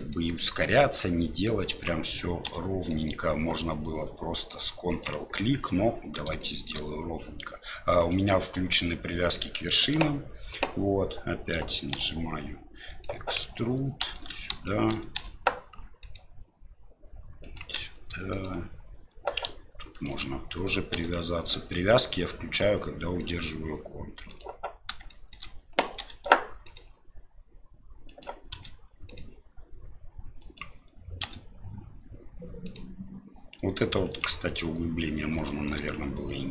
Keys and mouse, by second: 6.4 shift+middle click, 8.1-9.2 drag, 12.0 e, 14.6 shift+middle click, 15.1 e, 17.7 e, 20.9 e, 25.1 shift+middle click, 26.0 e, 28.5 e, 35.4 shift+middle click.